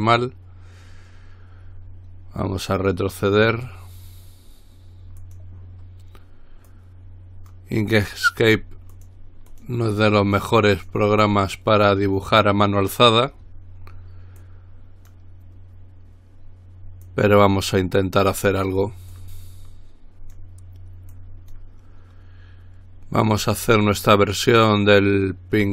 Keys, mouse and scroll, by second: 3.0 click, 5.4 click, 6.9-8.2 drag, 9.1 click, 10.1 click, 12.8 click, 14.6-15.8 drag, 17.2-18.4 drag, 19.3-21.1 drag, 21.4 click, 23.5-25.7 drag.